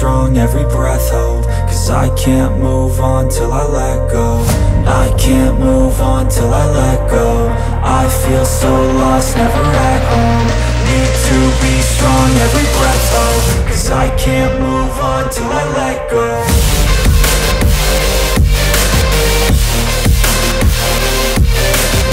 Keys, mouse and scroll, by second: 0.0-1.6 right drag, 1.8 Escape, 2.5 click, 3.9 right click, 5.8 Escape, 6.7 click, 8.2-10.7 right drag, 11.0 Escape, 11.8 click, 13.1-15.0 right drag, 15.2 Escape, 16.3 click, 17.6-20.3 right drag, 20.7 Escape, 21.6 click.